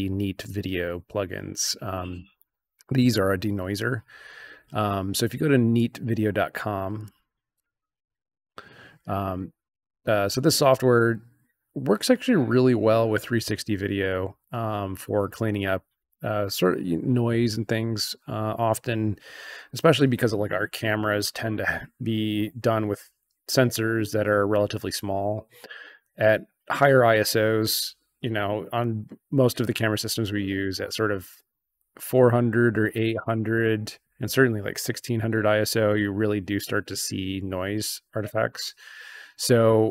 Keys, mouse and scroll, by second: 5.7 click, 6.9 click, 7.5 click.